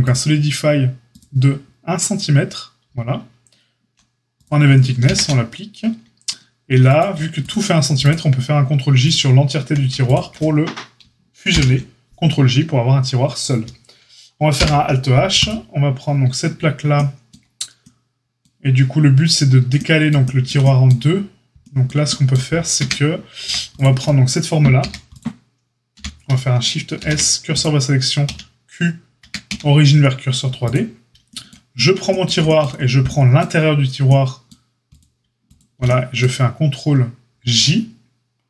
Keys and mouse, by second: 0.1-4.4 drag, 4.4-6.8 ctrl+middle drag, 5.0 ctrl+a, 6.8 drag, 7.1 shift+middle click, 7.3 click, 7.4-9.0 middle drag, 9.0 shift+click, 9.0-15.4 shift+middle drag, 11.5 ctrl+j, 14.5 alt+h, 15.4-16.5 drag, 16.5-35.4 shift+middle drag, 22.7 Tab, 23.4 a, 24.7 a, 25.9 l, 26.9 shift+s, 28.2 q, 29.2 Tab, 29.4 q, 35.4 shift+click, 35.5-38.4 shift+middle drag.